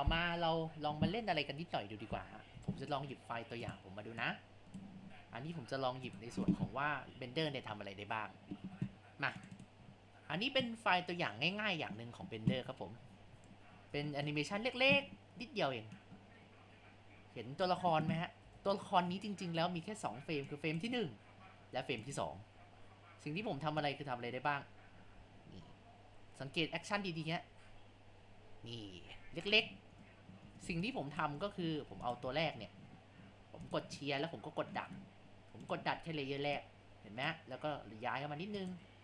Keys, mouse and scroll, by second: 0.4 click, 1.2 ctrl+z, 3.6 click.